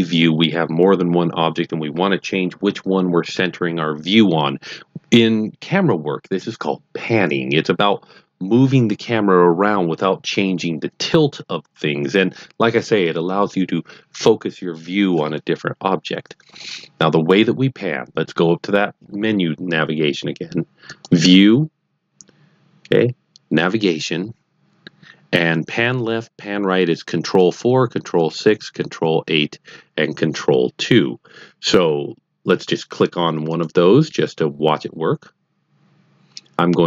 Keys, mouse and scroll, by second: 20.8 click, 34.7 click.